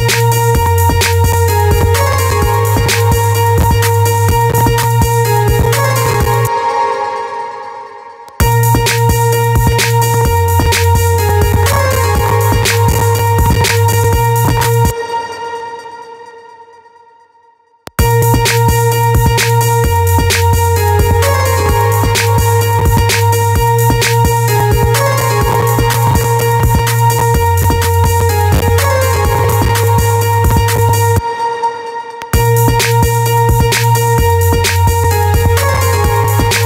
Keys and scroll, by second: 6.0 space, 7.7 space, 14.3 space, 17.2 space, 30.6 space.